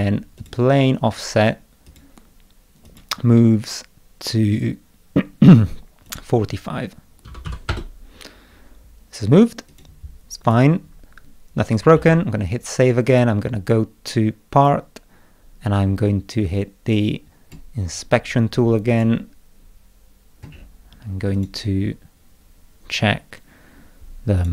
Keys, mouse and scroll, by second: 0.4 click, 1.9 click, 2.9 click, 6.1 click, 9.7 click, 10.5 click, 12.0 ctrl+s, 13.1 click, 14.6 click, 16.5 click, 18.9 click, 20.5 middle click, 20.5 scroll down 2, 21.4 click, 22.7 middle click, 24.4 click.